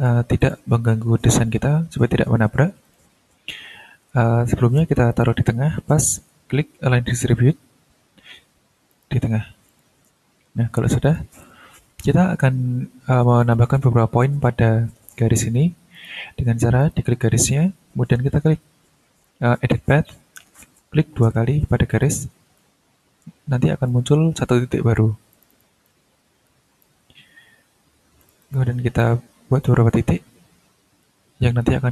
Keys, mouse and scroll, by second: 0.4 ctrl+click, 2.8 click, 3.6 ctrl+scroll down 2, 5.1 click, 8.9 click, 9.7 click, 11.0 click, 11.9-13.0 ctrl+scroll up 4, 13.4 ctrl+click, 13.9-14.2 scroll up 2, 15.5 scroll down 2, 15.9 click, 16.8 click, 17.5 ctrl+scroll up 2, 21.9 click, 22.5-24.0 ctrl+drag, 24.2 ctrl+scroll down 1, 25.3 click, 25.8 ctrl+click, 27.1-27.4 ctrl+scroll down 1, 28.2 click, 29.0 ctrl+click, 29.9-31.5 ctrl+scroll down 8.